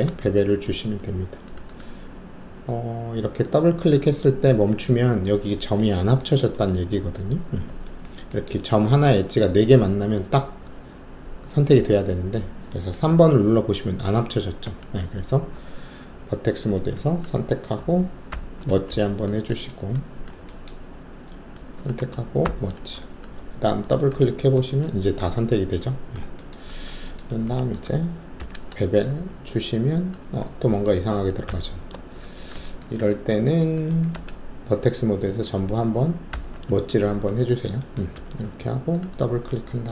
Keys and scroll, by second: 0.2 alt+2, 14.6 1, 15.5 alt+1, 18.3 ctrl+q, 22.4 ctrl+q, 23.3 alt+2, 28.4 alt+shift+b, 31.4 ctrl+alt+z, 32.3 w, 35.3 alt+1, 36.3 ctrl+q, 38.1 alt+2.